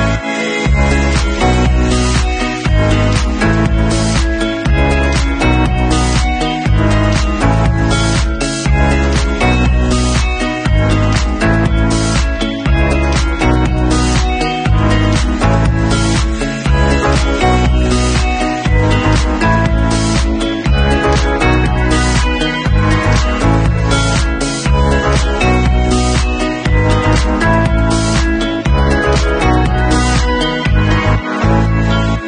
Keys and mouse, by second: 5.5 middle click, 5.5 right click, 6.3 shift+a, 9.2 w, 13.3 Tab, 13.8 middle click, 14.4 3, 14.6 click, 14.6-15.8 middle drag, 15.0 w, 15.8-18.5 drag, 18.5-18.9 middle drag, 18.9-21.2 drag, 21.2 middle click, 21.6-24.7 alt+drag, 24.7 middle click, 25.4-26.6 drag, 26.6 alt+middle click, 27.0-32.2 alt+drag, 27.9 ctrl+s.